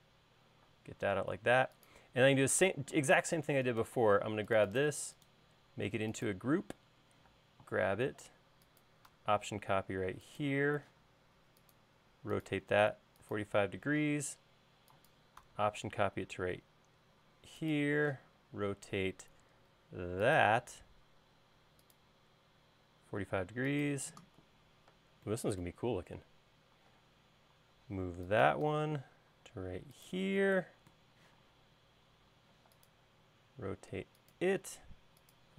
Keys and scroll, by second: 0.8 space, 7.3 m, 11.0 q, 14.2 m, 18.2 q, 27.2 m, 31.5 q.